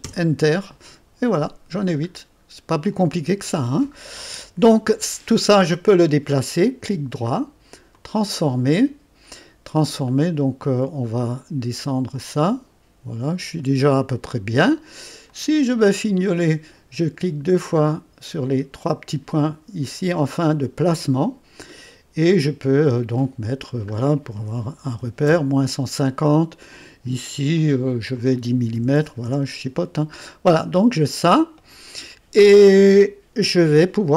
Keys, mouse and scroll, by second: 0.0-3.6 Return, 2.1-2.9 scroll up 1, 2.9 right click, 3.0 middle click, 3.6-7.9 right drag, 7.9-9.2 drag, 10.0 right click, 12.1-14.4 drag, 15.3 click, 17.9 click, 20.8 click, 23.2-24.4 drag, 24.4-25.2 typing, 27.5 click, 28.5-29.0 typing, 29.2 Return, 31.0 click, 31.0 typing.